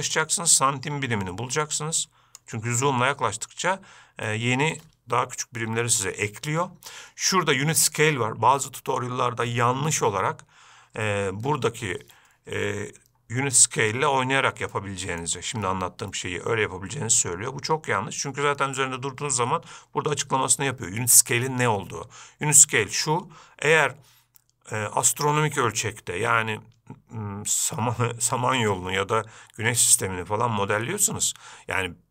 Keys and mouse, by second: 0.5-2.9 shift+drag, 4.6-5.1 shift+middle drag, 15.1-15.5 shift+middle drag.